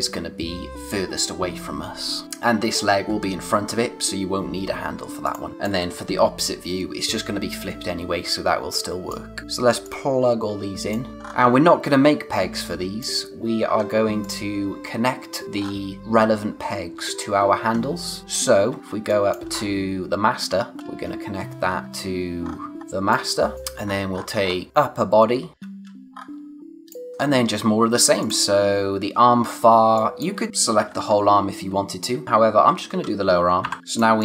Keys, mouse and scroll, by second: 2.2-3.9 scroll up 1, 5.2 click, 5.7 space, 8.7 click, 10.2 space, 11.0 scroll down 1, 11.2 scroll up 1, 12.5 space, 12.6 click, 13.0 space, 13.7-14.2 scroll down 1, 14.2 click, 15.6-17.2 scroll up 1, 17.3-18.1 scroll down 1, 18.1 space, 18.2 click, 18.3 space, 18.6 scroll down 1, 18.8 scroll up 1, 18.9 space, 19.1 click, 19.5-20.4 scroll up 1, 20.4 click, 20.8 space, 21.6 scroll up 1, 21.8 space, 22.4-22.7 scroll up 1, 23.5 space, 23.8-24.4 scroll up 1, 24.7 click, 24.9 space, 26.1-26.9 scroll up 1, 28.2 click, 29.3-29.8 scroll down 1, 29.8-32.2 typing, 29.9 click, 30.5 click, 33.9 click, 34.0 space.